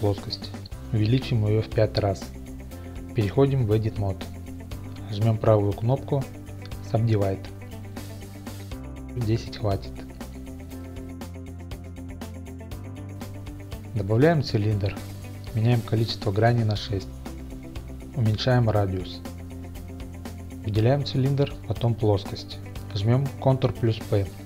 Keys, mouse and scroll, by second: 1.7 s, 1.7 KP_5, 2.1 KP_Enter, 4.0 Tab, 4.8 right click, 8.2-10.7 drag, 11.0 Tab, 13.4 shift+a, 15.6-16.6 drag, 16.8 click, 19.8 click, 19.8 g, 22.8 ctrl+p.